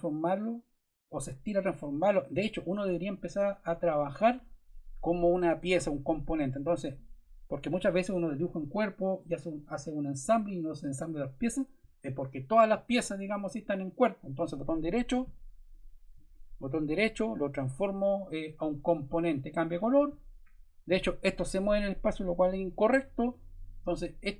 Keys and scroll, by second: 22.3 super+Caps_Lock, 22.5 super+z.